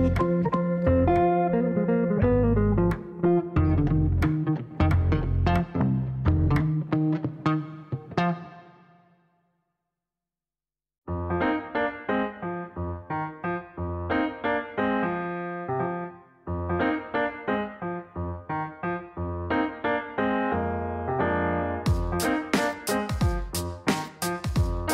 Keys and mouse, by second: 2.0 click, 2.7 middle click, 3.6 middle click, 4.8 click, 5.1 middle click, 6.4 click, 8.5 click, 8.6 click, 8.7 click, 9.9 KP_2, 10.3 KP_Enter, 11.6 click, 12.7 click, 14.3 click, 15.1 click, 15.6 click, 16.0 middle click, 17.5 click, 17.9 middle click, 19.0 click, 19.9 click, 21.2 click, 21.3 click, 21.5 click, 22.5 KP_0, 22.6 KP_Decimal, 22.8 KP_5, 23.1 KP_Enter, 24.5 middle click.